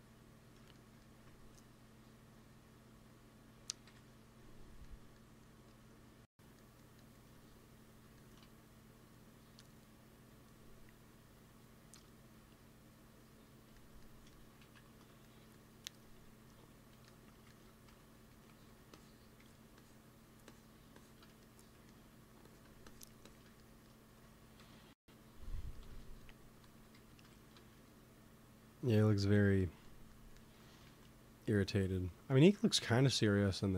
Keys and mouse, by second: 3.4 click, 3.7 KP_1, 7.6-13.1 drag, 11.8 KP_1, 13.2 click, 14.6 ctrl+z, 16.9 i, 17.8 f, 18.4 f, 18.9-21.4 drag, 19.3 f, 23.6-25.0 drag, 24.5 KP_1, 26.7 g, 26.8 f, 27.6 f, 29.1-30.7 drag, 30.7 ctrl+s.